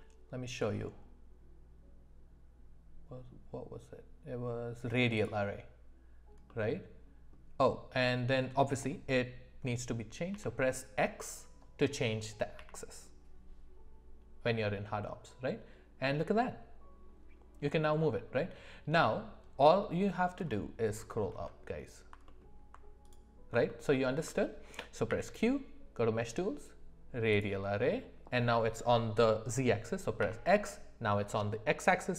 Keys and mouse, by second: 6.5-22.4 middle drag, 23.7 alt+middle drag, 23.9 alt+middle click, 25.1 q.